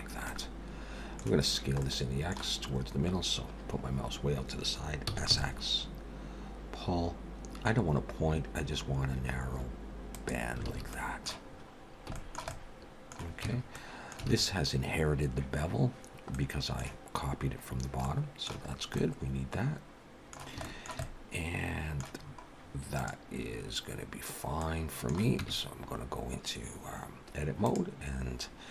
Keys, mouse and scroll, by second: 0.3 middle click, 1.2 scroll up 1, 1.8 middle click, 2.7-3.1 scroll up 2, 5.1 s, 10.7 alt+a, 10.9 middle click, 11.5-11.9 scroll up 4, 12.1 shift+middle click, 12.5 middle click, 13.5 Tab, 13.7 middle click, 14.3 alt+a, 16.3 middle click, 17.3-17.8 scroll down 3, 18.0 middle click, 18.6-19.0 scroll up 3, 19.0 middle click, 20.7 shift+middle click, 21.0 middle click, 22.2-22.8 scroll up 3, 23.0 click, 24.6 middle click, 25.4 Tab, 25.8 scroll down 1, 27.7 click.